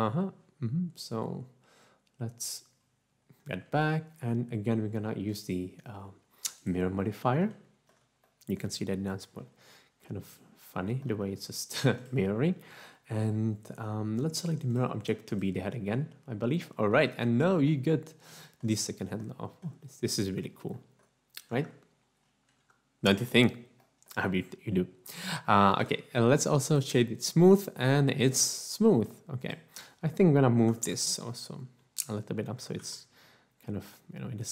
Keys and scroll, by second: 21.8 Tab, 23.1 Tab, 31.7 3, 32.7 typing.